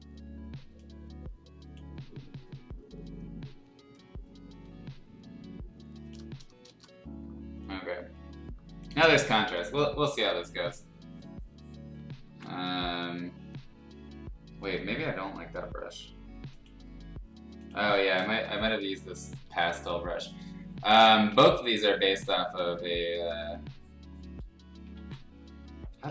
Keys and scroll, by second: 6.6 Return, 7.0 l, 12.2 ctrl+z, 17.7 l, 18.8 ], 19.0 ], 19.5 ], 19.8 [, 21.1 ctrl+z, 24.9 ctrl+z.